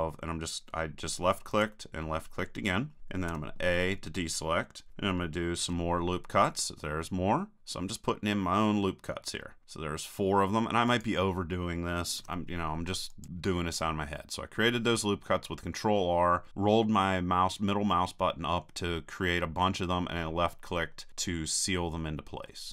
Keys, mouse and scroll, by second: 1.6-3.2 drag, 3.4 a, 5.6 ctrl+r, 13.2-14.5 drag, 22.5-22.7 middle drag.